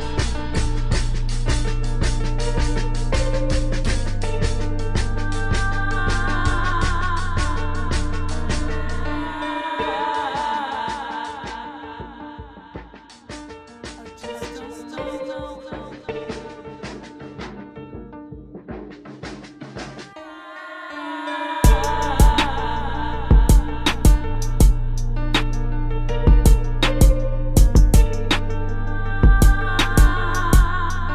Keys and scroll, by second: 3.9-7.3 typing, 8.6-10.3 typing, 11.9 space, 22.1 space, 22.7 space, 23.1 space, 26.6 space, 27.2 space, 30.9 space.